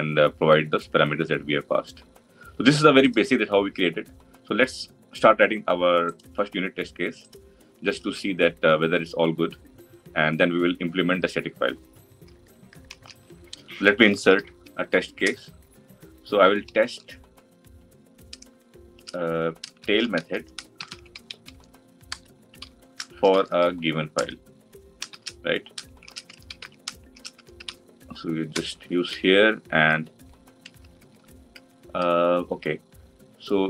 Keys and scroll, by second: 7.8 Tab, 14.3 alt+Insert.